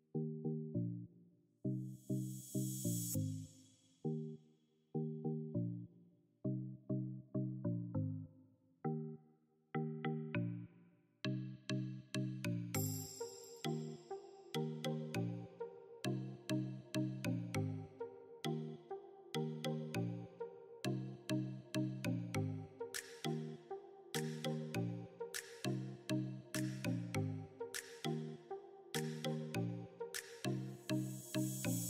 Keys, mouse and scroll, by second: 4.1-6.3 drag, 6.6-9.3 alt+drag, 9.3 right click, 10.8 click, 11.9 click, 13.3 right click, 14.5-19.5 drag, 19.5 right click, 20.2 click, 23.4-24.1 scroll up 1, 24.3 click, 24.7 ctrl+z, 24.8-26.1 alt+shift+drag, 26.3 click, 27.0 click, 27.0 right click, 27.2 click, 28.2 right click, 28.3 click, 28.7 right click, 29.0 click, 29.0 space, 29.1 click, 29.3 right click, 29.5 click, 29.8 right click, 29.9 click, 30.0 scroll down 1, 30.0 space, 30.1 alt+click, 30.4 right click, 30.5 click, 31.0 click, 31.0 right click, 31.1 click, 31.6 right click, 31.8 right click.